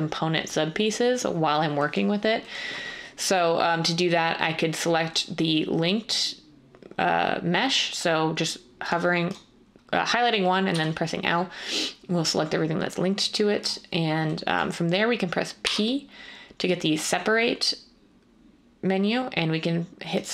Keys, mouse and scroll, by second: 10.7 l, 15.6 p.